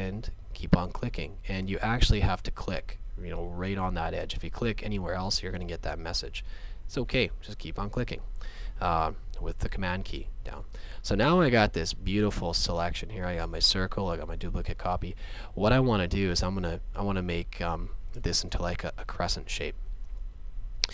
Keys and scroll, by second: 1.7 space, 4.2 space, 11.4 space.